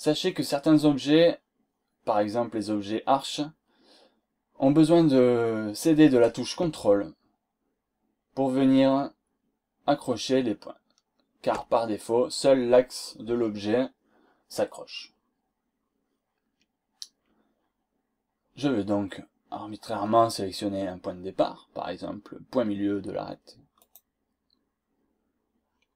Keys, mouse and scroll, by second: 4.9-5.3 scroll down 2, 5.6-6.0 scroll up 2, 23.7 click, 25.6 scroll down 2.